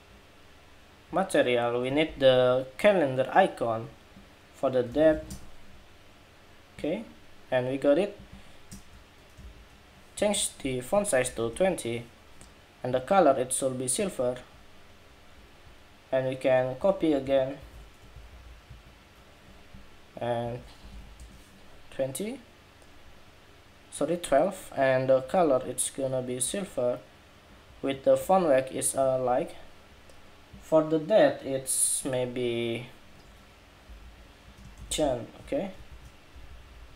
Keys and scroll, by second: 16.9 super+c, 18.0 super+v, 35.1 Escape.